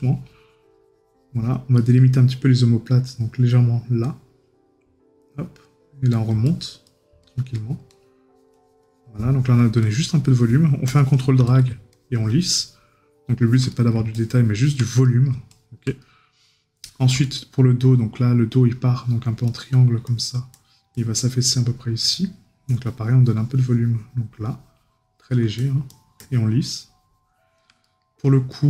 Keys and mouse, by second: 1.8 right click, 13.7 right click, 15.0 right click, 27.8 right click.